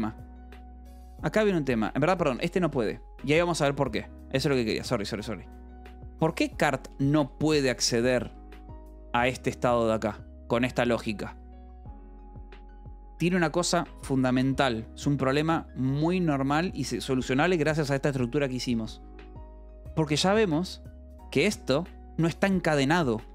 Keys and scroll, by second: 0.0-0.1 typing, 1.9 j, 2.8 j, 4.7 d, 4.9 Escape, 5.5 j, 7.1 k, 7.5 Escape, 7.7 k, 8.7 j, 9.6 shift+v, 14.8 Escape, 21.7 shift+v, 23.1 Escape.